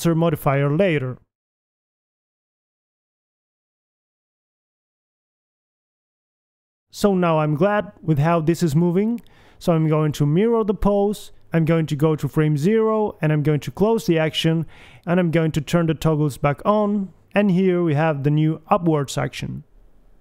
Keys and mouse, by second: 0.3 g, 1.1 middle click, 1.5 KP_1, 2.1-3.5 middle drag, 4.0 a, 8.7 KP_1, 9.5 a, 9.8 a, 9.9 b, 11.6-13.0 drag, 13.0 a, 13.4 Left, 14.5 click, 15.6-16.7 drag, 16.7 a, 17.1 alt+g, 17.1 a, 17.2 alt+r, 17.3 alt+s, 17.3 a, 17.6 right click, 18.0 click, 18.3 g, 19.6 g.